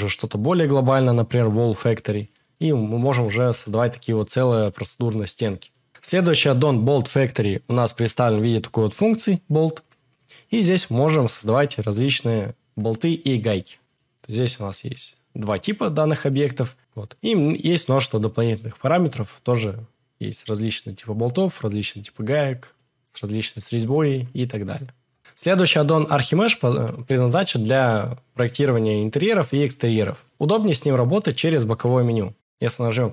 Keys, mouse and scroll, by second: 14.9 click, 16.2-16.8 drag, 18.6 click, 21.0-22.2 drag, 25.1 x, 25.2 shift+a, 31.8 n.